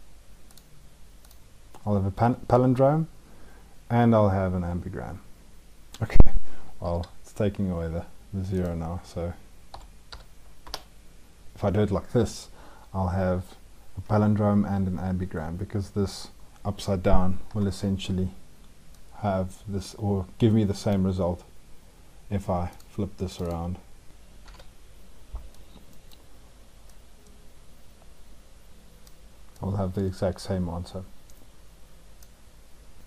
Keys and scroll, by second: 6.7 ctrl+z, 24.3 ctrl+v.